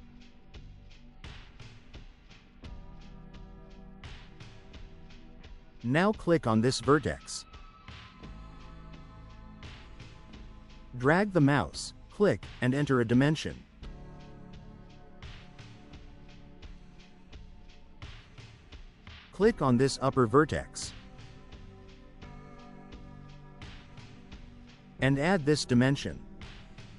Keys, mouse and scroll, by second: 2.1 7, 2.5 0, 6.9 right click, 8.5 click, 12.7 click, 14.5 2, 15.0 0, 15.9 Return, 20.2 right click, 22.7 click, 24.8 click.